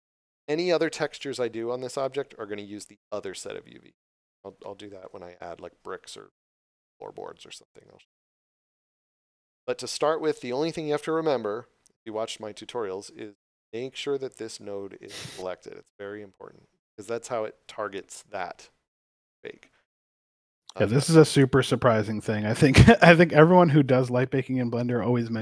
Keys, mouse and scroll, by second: 4.6 shift+middle click, 22.0 right click.